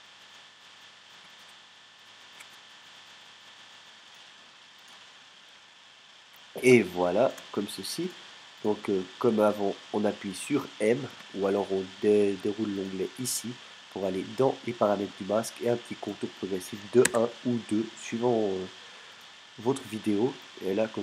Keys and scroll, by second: 1.2 space, 2.3 space, 6.7 alt+space, 11.1 m, 17.1 shift+\.